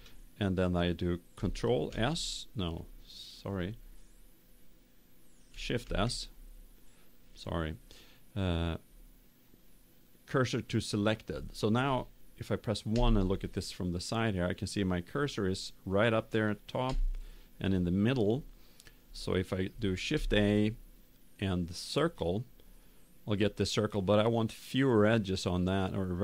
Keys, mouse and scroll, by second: 3.5 ctrl+s, 3.5 click, 5.8 shift+s, 12.9 KP_1, 16.8 KP_7, 20.0 shift+a.